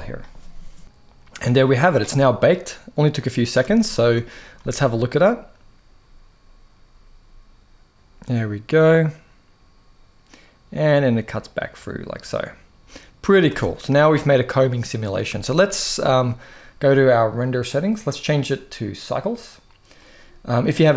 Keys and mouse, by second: 0.8 middle click, 2.2-3.2 drag, 3.4 alt+a, 3.6-4.2 middle drag, 4.3 space, 13.2 space, 13.4-14.9 middle drag, 15.1 shift+middle click, 17.3 click, 18.2-19.0 drag.